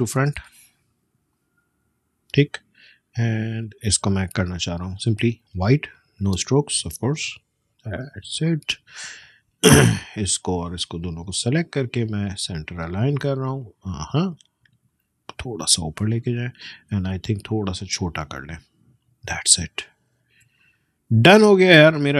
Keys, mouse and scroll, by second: 14.5 click, 16.1 shift+Up, 18.5-20.7 alt+shift+drag, 21.5-22.1 alt+scroll down 1.